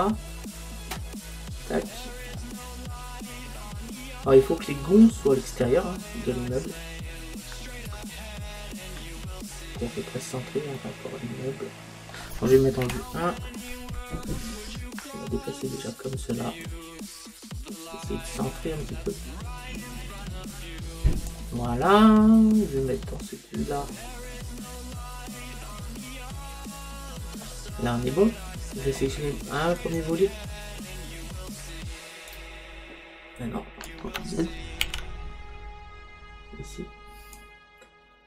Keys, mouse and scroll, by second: 2.4-6.9 middle drag, 10.3-12.7 middle drag, 12.9 KP_1, 16.7 click, 22.1-23.9 middle drag, 28.0-29.8 middle drag, 29.8-32.3 right drag, 32.3 click, 35.0 ctrl+z, 37.4 click.